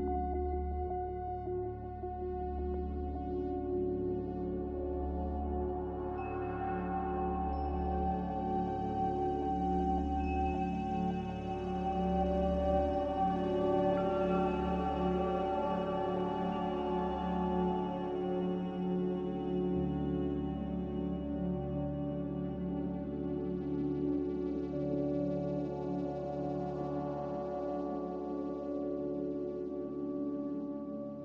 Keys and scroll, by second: 9.0 x, 11.7 g, 15.2 z, 27.8 typing, 28.5 Return.